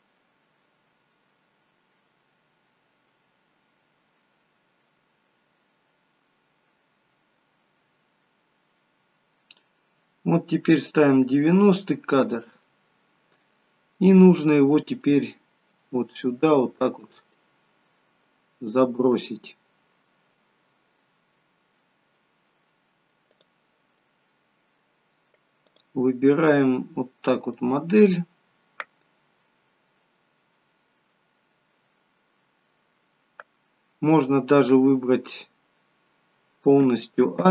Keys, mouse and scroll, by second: 11.5-12.3 scroll up 2, 12.3 middle click, 12.3-13.9 scroll up 3, 14.7 middle click, 15.0 shift+middle click, 16.0 shift+middle click, 17.5 middle click, 17.6 shift+middle click, 23.5 click, 24.1 middle click, 25.7 click, 27.6 middle click, 35.4-36.8 scroll down 2, 36.8-37.5 scroll down 1, 36.8 a.